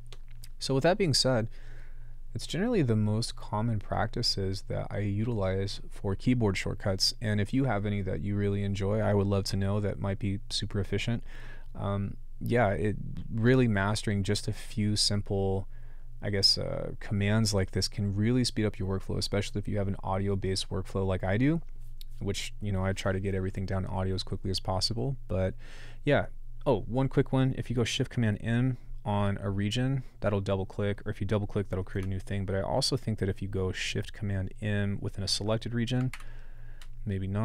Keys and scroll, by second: 31.9 BackSpace, 36.1 shift+super+m.